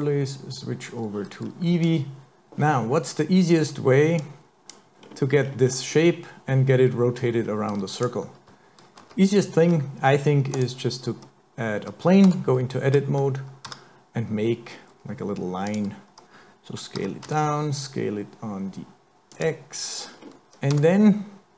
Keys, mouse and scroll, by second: 0.5 click, 2.4 scroll down 2, 2.4 KP_7, 4.2 click, 5.0-5.4 scroll up 2, 5.4-7.1 scroll down 3, 7.4-7.9 scroll up 1, 8.0 click, 9.0 shift+a, 12.3 Tab, 13.7 s, 17.0 s, 20.1-20.4 scroll up 4, 20.4-20.8 scroll down 7, 20.8 Tab.